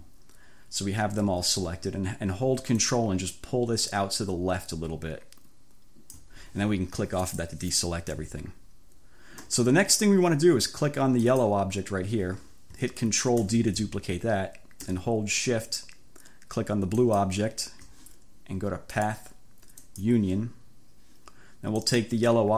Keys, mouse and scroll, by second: 2.9-3.6 ctrl+scroll up 2, 3.6-4.8 ctrl+scroll up 1, 4.8-6.0 ctrl+scroll up 1, 6.0-6.4 ctrl+scroll up 1, 7.3-7.6 scroll up 2, 11.4-11.7 scroll up 2, 13.5 ctrl+d, 17.0 shift+click, 19.1 click, 20.0 click, 21.9 click.